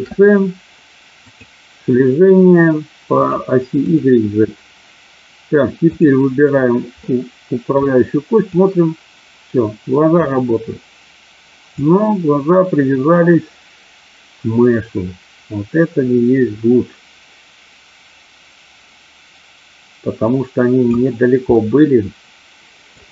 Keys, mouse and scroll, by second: 3.8 click, 5.9 click, 7.0 middle click, 8.4-10.3 drag, 11.8-20.9 drag, 21.5-23.0 middle drag.